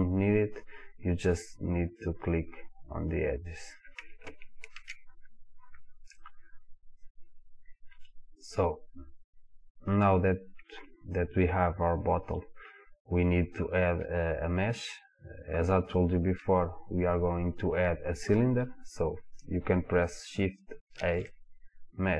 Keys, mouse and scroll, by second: 2.0-3.5 drag, 4.8 ctrl+z, 6.2-10.0 drag, 10.7-11.1 scroll up 1, 11.9-13.0 scroll down 1, 13.0-17.0 scroll up 1, 21.0 shift+a.